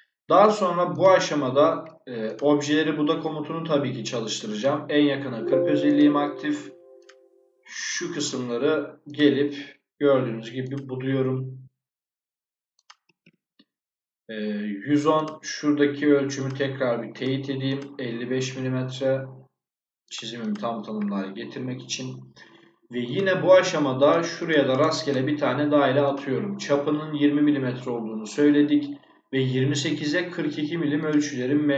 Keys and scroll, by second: 12.9 Escape.